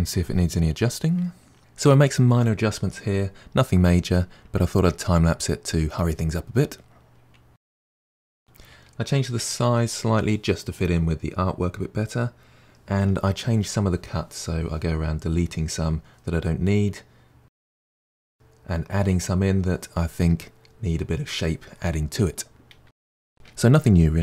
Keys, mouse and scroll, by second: 0.1 middle click, 1.0 middle click, 1.3 g, 1.6 scroll down 1, 1.7 middle click, 1.8 Tab, 1.9-2.6 middle drag, 2.7 scroll up 5, 2.7-3.0 middle drag, 3.0 Tab, 3.2 2, 3.4 alt+click, 3.7 e, 4.0 middle click, 5.0 middle click, 5.3 scroll down 2, 5.5 middle click, 6.2 Tab, 6.3 middle click, 6.4-6.8 scroll down 2, 7.4 middle click, 7.8 middle click, 8.4 scroll up 3, 8.6 middle click, 10.0 click, 10.2 s, 11.0 KP_1, 11.0 g, 11.3 click, 11.4 g, 11.9 middle click, 12.5 click, 12.9 middle click, 13.0-13.3 scroll up 3, 13.4 KP_Divide, 13.6 1, 13.7 click, 14.0 middle click, 14.0 click, 14.1 click, 14.2 middle click, 14.4 g, 14.6 middle click, 14.7 click, 14.8 g, 14.8 middle click, 15.2 middle click, 15.3 2, 15.4 middle click, 15.5 shift+click, 15.6 middle click, 15.9 Delete, 16.0 middle click, 16.2 KP_Divide, 16.3 middle click, 17.2 middle click, 17.8 scroll up 3, 18.1 k, 18.4 middle click, 18.8 2, 18.8 click, 19.0 Delete, 19.1 middle click, 19.8 middle click, 19.9-20.3 scroll down 1, 20.5 middle click, 21.5 Tab, 21.6 click, 21.7 Tab, 21.8 middle click, 22.0-23.3 typing, 22.4 middle click.